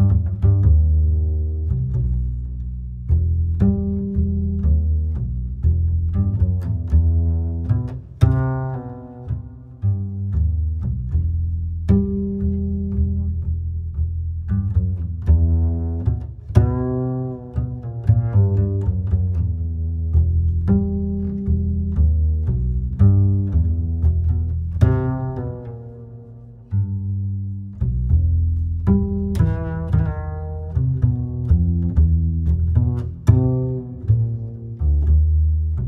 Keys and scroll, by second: 3.1 ctrl+e, 4.7 ctrl+e.